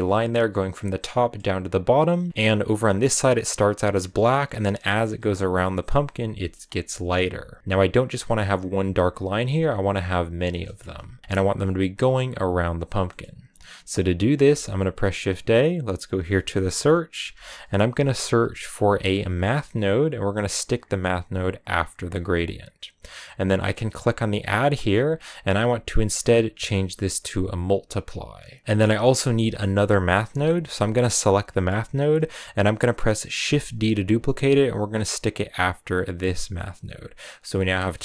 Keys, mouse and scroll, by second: 3.4 scroll down 2, 3.6-7.6 middle drag, 7.6-9.0 scroll up 1, 22.2 click, 33.3 shift+d, 36.4-38.0 drag.